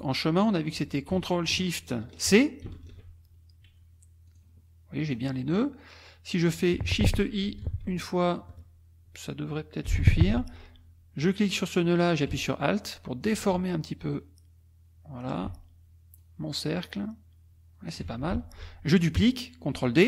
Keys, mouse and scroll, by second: 2.7 ctrl+shift+c, 4.3 click, 5.1 click, 6.0 click, 7.6 shift+i, 10.4-13.4 drag, 14.1-15.4 alt+drag, 16.2-18.1 alt+drag, 18.3 alt+F1.